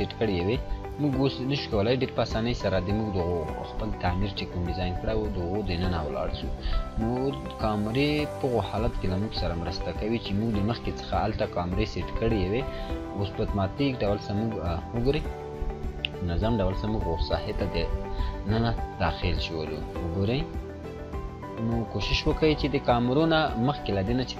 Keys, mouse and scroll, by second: 0.9-1.9 scroll up 2, 1.9-7.5 drag, 7.6-9.2 scroll down 1, 9.2 click, 11.7 click, 15.1 click, 15.1 click, 20.6 click, 24.0-24.3 drag.